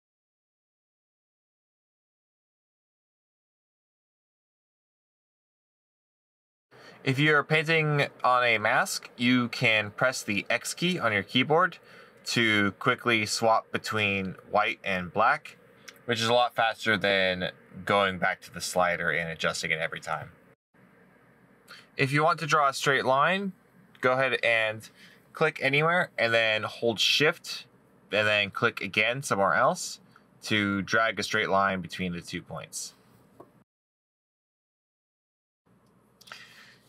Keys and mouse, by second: 20.7 middle click.